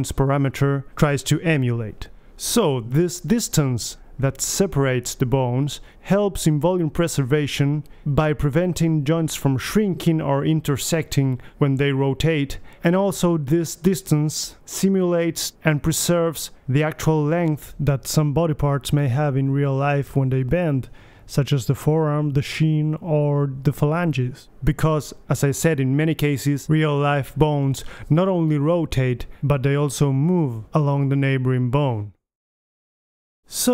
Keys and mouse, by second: 0.5-4.1 middle drag, 2.4 g, 5.5-7.6 middle drag, 7.0 g, 8.0-9.6 drag, 9.6-12.9 middle drag, 11.7 g, 13.3-14.9 drag, 15.4-19.2 drag, 19.2-22.4 middle drag, 24.2 ctrl+z, 26.8-28.6 drag.